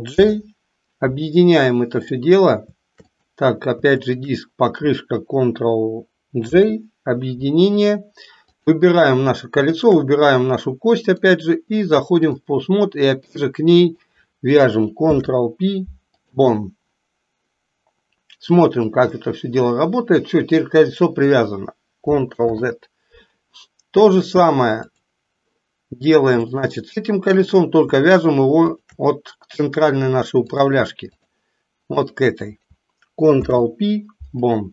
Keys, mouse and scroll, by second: 0.2 ctrl+j, 1.9 click, 3.2 click, 3.9 shift+click, 6.5 ctrl+j, 8.5 click, 11.1-12.5 drag, 13.3-14.1 drag, 15.1 ctrl+p, 18.8-21.2 drag, 22.4 ctrl+z, 24.1-25.1 drag, 26.6 click, 30.4 click, 32.0 click, 33.2 ctrl+p.